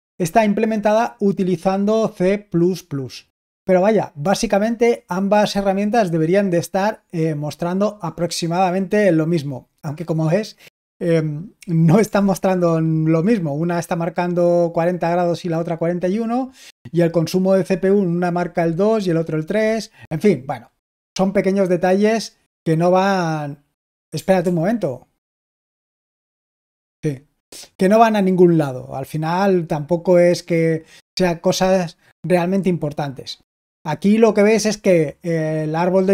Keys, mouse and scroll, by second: 24.3 super+l.